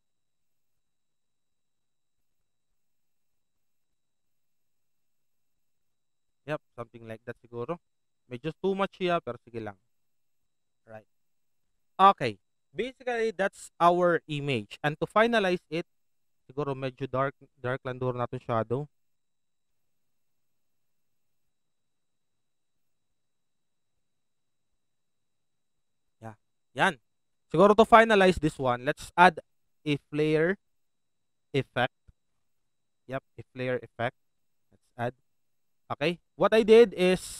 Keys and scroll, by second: 6.8 alt+v, 10.3 alt+v.